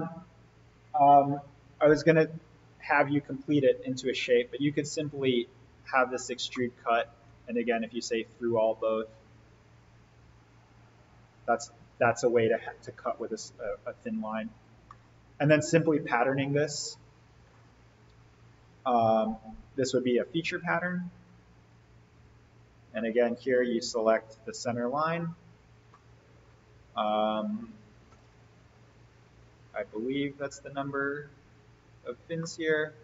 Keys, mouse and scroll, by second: 3.9 click, 6.4-7.5 middle click, 7.7 click, 12.9 click, 14.7-15.5 middle click, 15.7 click, 21.2 click, 23.5 alt+v, 25.0 click, 25.6 scroll up 1, 25.8-26.4 middle drag, 27.2 click, 28.0 4, 29.9 click, 32.3-33.0 middle drag.